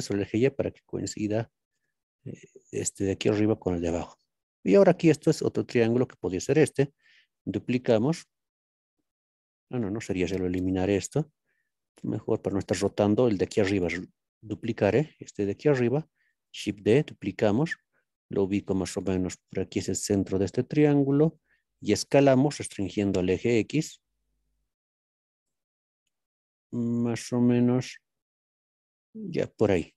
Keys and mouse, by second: 1.7 click, 6.0 click, 7.3 shift+d, 9.7-10.4 drag, 12.2 shift+click, 12.3 shift+middle click, 12.5 shift+middle click, 12.6 shift+click, 12.7 shift+middle click, 13.3 click, 16.2 shift+d, 21.4 click, 22.7 shift+x, 29.3 click.